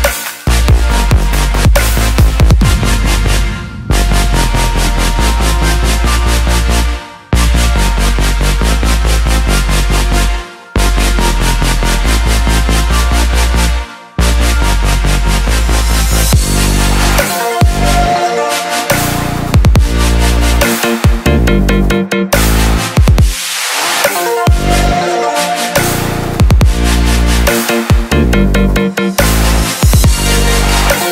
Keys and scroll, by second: 10.5 ctrl+j, 28.5 ctrl+t.